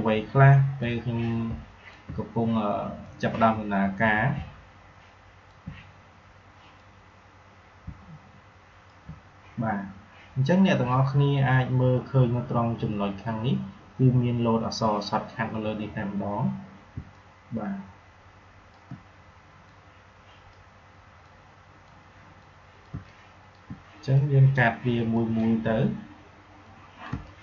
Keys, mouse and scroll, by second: 0.8-3.0 drag, 3.0-6.7 drag, 6.7-11.2 drag, 13.3 click, 16.9 space, 17.0 click, 17.3 space, 19.6-22.8 drag, 22.8 space, 23.0 click, 23.3 space, 24.1-27.0 drag, 27.0 space, 27.2 click.